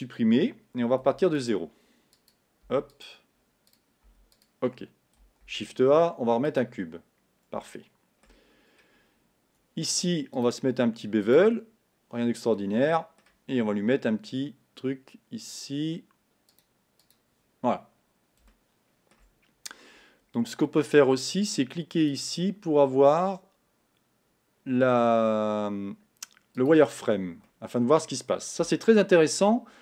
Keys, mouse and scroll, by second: 0.2 Tab, 1.6 x, 2.4 click, 2.7 x, 3.8 click, 4.4 x, 6.8 shift+a, 7.7 shift+middle click, 8.5 scroll up 2, 11.6 click, 12.6-16.8 middle drag, 16.8 click, 18.5-26.7 shift+middle drag, 26.7 click, 27.5-29.8 middle drag.